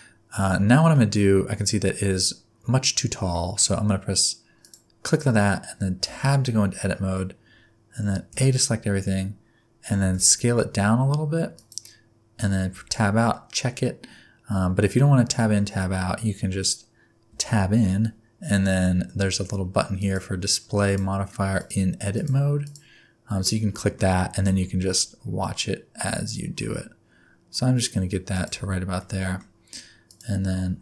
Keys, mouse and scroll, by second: 0.9 middle click, 4.6 click, 6.1 Tab, 8.3 a, 10.0 s, 12.7 Tab, 13.3 middle click, 17.3 Tab, 20.0 click, 20.8 click, 21.6 click, 22.1 click, 22.6 click, 23.7 middle click, 24.3 s, 28.5 Tab, 29.0 middle click, 30.1 click.